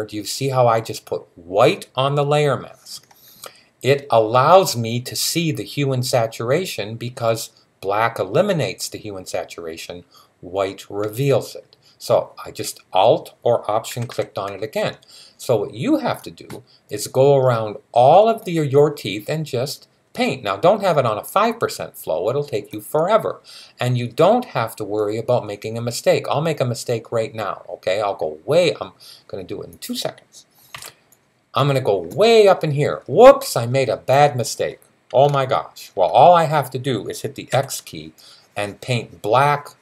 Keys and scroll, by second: 13.7-14.3 typing, 30.5 ], 37.3 x.